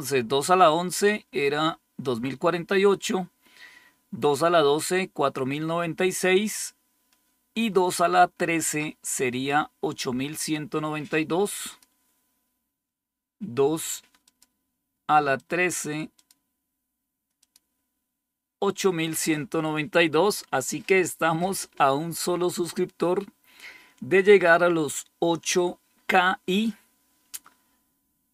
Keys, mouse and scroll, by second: 11.5 click, 12.0 click, 14.1 click, 15.2 click, 16.0 click, 17.2 click.